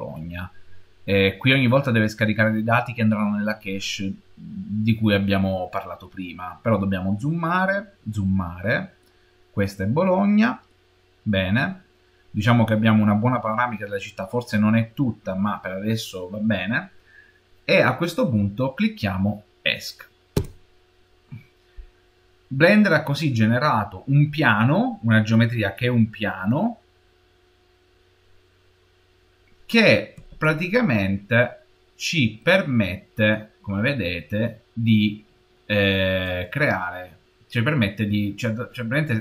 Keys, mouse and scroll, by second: 25.6-26.8 scroll down 1, 26.8-28.1 scroll down 2, 28.1-28.5 scroll up 1, 28.5-30.0 scroll down 5, 30.0 Escape, 30.6-31.0 scroll down 3, 31.0-31.9 scroll up 3, 31.9-32.3 scroll down 4, 32.3 middle click, 32.5 middle click, 32.9-34.4 middle drag, 33.6-34.4 scroll down 4, 34.4-35.0 scroll down 4, 35.0 middle click, 35.0 scroll up 3, 35.4 scroll down 3.